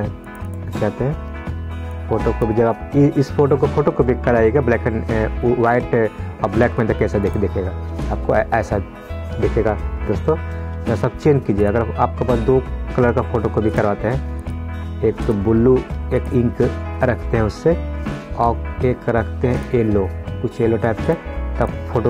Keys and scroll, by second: 10.4 ctrl+z.